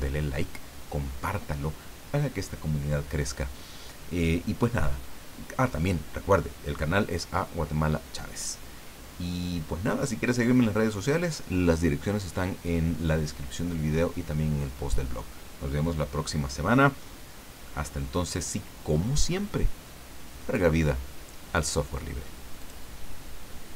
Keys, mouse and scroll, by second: 22.6 click, 23.7 click.